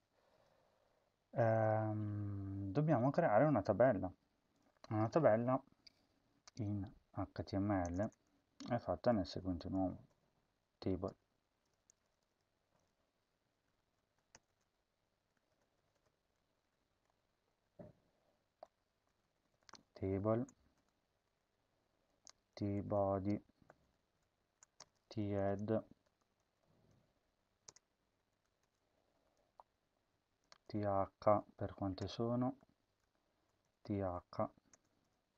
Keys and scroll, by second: 7.9 Return, 9.1-14.3 typing, 14.5 Return, 15.5-16.5 typing, 16.6 Up, 16.9 Left, 17.0 Up, 17.5 Tab, 18.8-20.3 typing, 20.7 Return, 21.2 Tab, 22.1-28.3 typing, 28.6 Return, 29.2 Tab, 30.1-31.2 typing, 32.0 Return, 32.4 \, 33.6-35.3 typing, 34.7 Return.